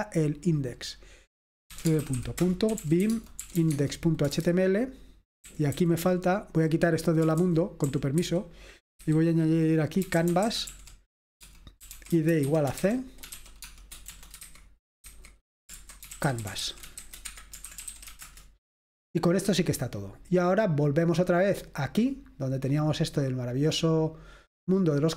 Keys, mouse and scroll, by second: 1.7-4.4 typing, 5.5-18.6 typing, 22.0 click, 23.9 click.